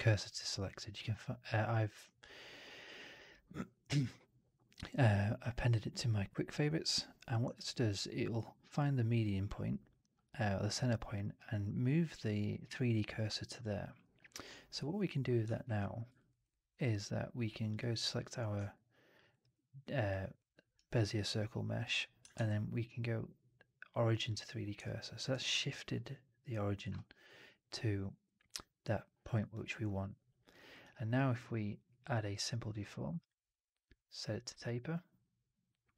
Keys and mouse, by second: 7.4-8.6 alt+drag, 13.5 alt+click, 14.6 4, 15.5 shift+x, 16.1 alt+right drag, 16.3 alt+click, 17.6 click, 18.6-19.0 alt+drag, 19.2 alt+right drag, 19.4-20.0 alt+drag, 20.3-20.7 alt+right drag, 20.8-21.7 alt+drag, 22.2 shift+Tab, 24.7-25.1 alt+drag, 25.2 alt+right drag, 25.4-26.7 alt+drag, 29.4 alt+click, 30.3-33.2 drag.